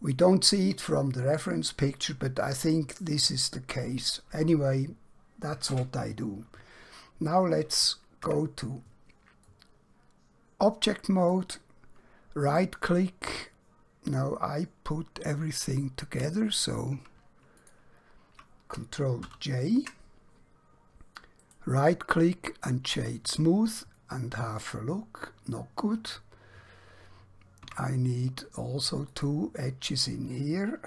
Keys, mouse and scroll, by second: 8.3 Tab, 9.5 middle click, 12.5 right click, 16.6 click, 17.5 shift+click, 21.5 right click, 22.9 click, 24.0 middle click, 27.7 Tab, 29.1 click.